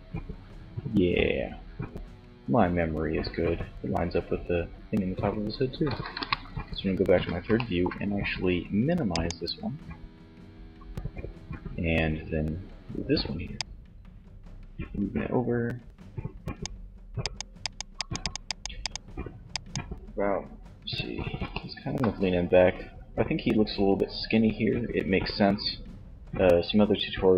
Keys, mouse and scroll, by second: 5.2 KP_3, 8.1 click, 12.9-14.6 drag, 16.3-17.8 drag.